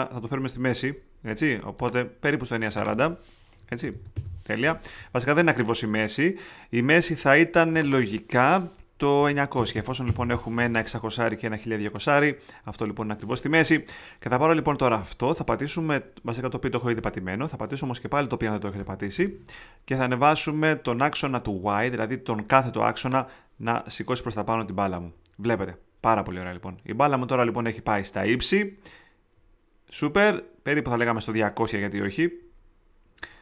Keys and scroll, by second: 3.3-4.4 typing, 9.1 9, 9.5 0, 10.0 Return, 18.1 alt+p.